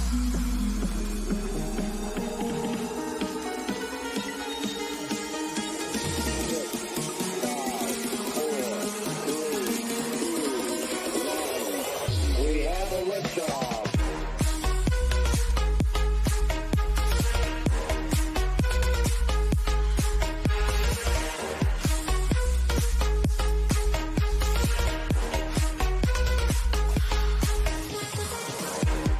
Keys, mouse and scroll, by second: 0.1 click, 0.9-1.4 scroll down 1, 2.6-7.2 drag, 8.2 click, 10.8 click, 13.0 Right, 14.3-14.7 scroll down 1, 14.7 click, 15.2-15.5 scroll up 1, 19.6 scroll up 1, 21.9 click, 26.0 click, 27.0 scroll up 1, 27.4-29.1 drag.